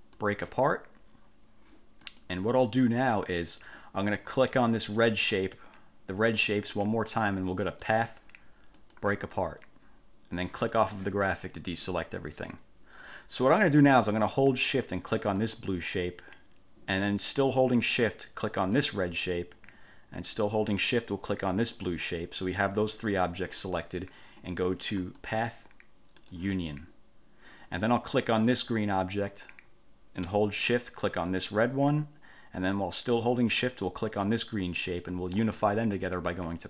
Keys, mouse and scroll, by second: 0.3 click, 2.2 click, 5.1 click, 8.0 click, 8.9 click, 10.8 click, 15.6 shift+click, 19.0 shift+click, 21.8 shift+click, 25.4 click, 26.4 click, 28.6 click, 31.5 shift+click, 34.4 shift+click.